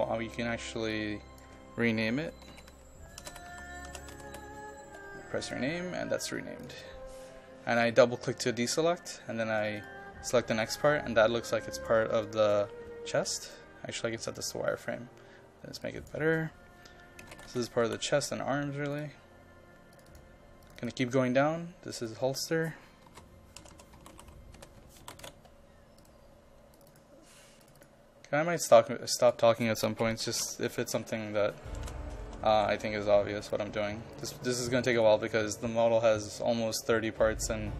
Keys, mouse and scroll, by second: 0.9 click, 2.0-4.3 typing, 5.4 click, 11.5 ctrl+click, 12.2 ctrl+click, 13.4 right click, 14.3 click, 17.0-18.4 typing, 18.9-21.9 drag, 23.1-25.8 typing, 26.0-29.9 drag, 29.7-32.5 typing, 33.4 click.